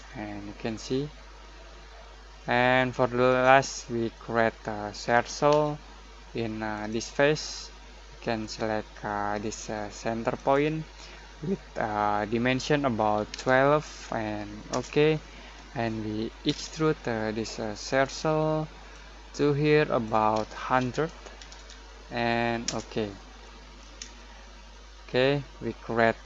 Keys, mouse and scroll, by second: 0.0-4.5 shift+middle drag, 4.5-5.5 scroll down 1, 5.5 c, 6.7 click, 10.3 click, 10.3 click, 13.1 typing, 14.7 Return, 16.4 e, 17.8 click, 18.0-20.8 drag, 20.8-21.5 typing, 22.6 Return, 23.4 middle click, 24.1-26.2 shift+middle drag.